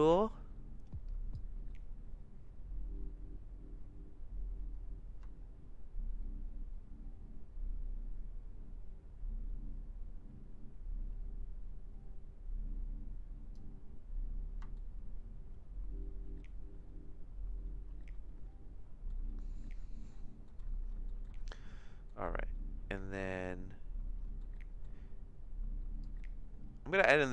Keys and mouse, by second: 1.4-13.6 drag, 14.7-19.1 shift+middle drag, 22.1 middle click, 23.3 middle click, 24.5 middle click, 26.0-27.3 drag.